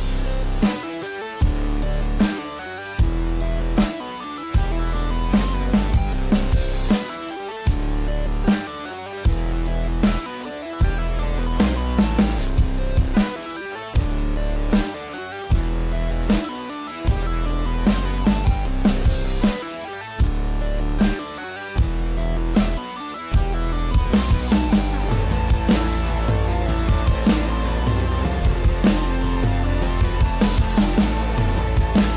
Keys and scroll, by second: 9.6 ctrl+l, 23.3 ctrl+j, 25.3 ctrl+e, 29.6 ctrl+b.